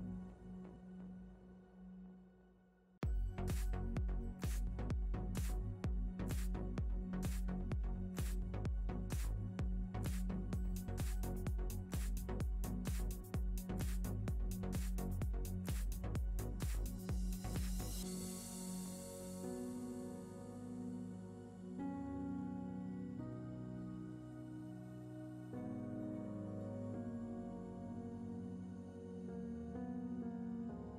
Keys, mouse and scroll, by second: 1.5 click, 2.0 click, 3.8 click, 4.8 shift+a, 11.4 click, 14.7 shift+middle click, 16.2 shift+a, 21.4 click, 27.2 shift+middle click, 28.3 click.